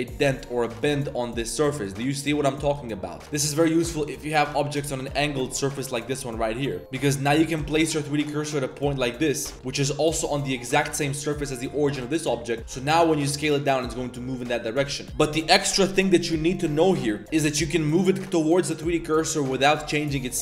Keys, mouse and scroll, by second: 0.4 Tab, 0.7 click, 0.9 s, 1.4 click, 1.5 s, 2.0-2.5 drag, 3.0 click, 3.3-4.1 middle drag, 4.5 click, 5.0 click, 5.2 drag, 5.5 click, 5.9 click, 6.0 drag, 6.2 middle click, 6.5 drag, 6.7 Tab, 6.8 3, 6.9 click, 7.1 drag, 7.5 shift+s, 8.0 click, 8.5 click, 9.4 Tab, 9.8 click, 9.8 z, 10.6 click, 10.8 z, 11.0 click, 11.2 middle click, 12.1 middle drag, 12.6 s, 14.9 click, 16.8 click, 17.4 s, 20.1 click.